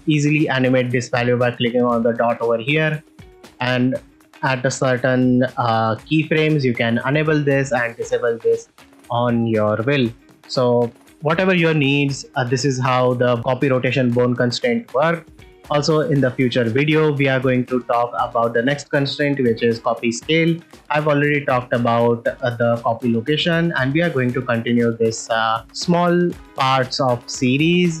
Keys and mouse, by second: 6.6 click, 12.6 r, 16.4-28.0 drag.